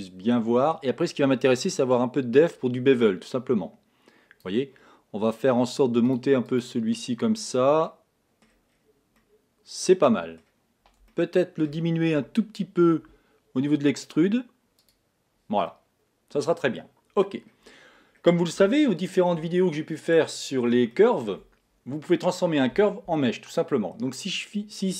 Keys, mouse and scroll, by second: 1.2-1.7 scroll down 1, 2.9 click, 6.5 click, 7.7-8.2 scroll down 4, 8.2 middle click, 9.1-9.5 scroll down 4, 9.5-14.5 middle drag, 15.2 click, 16.1-17.1 middle drag, 17.1 scroll down 2, 17.7 scroll up 2, 18.2 scroll down 2, 19.1-24.8 shift+middle drag.